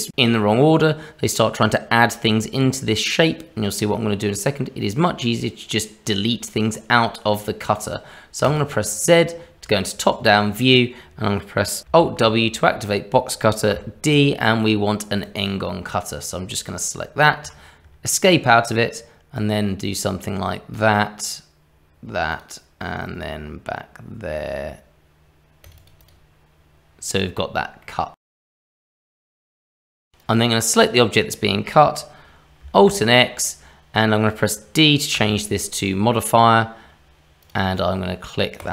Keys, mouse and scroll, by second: 8.4 click, 9.3 scroll down 1, 9.7 shift+middle click, 12.0 alt+w, 13.7 d, 19.3 click, 27.4-27.8 scroll up 1, 27.8 middle click, 30.2 click, 32.7 alt+x, 38.6 click.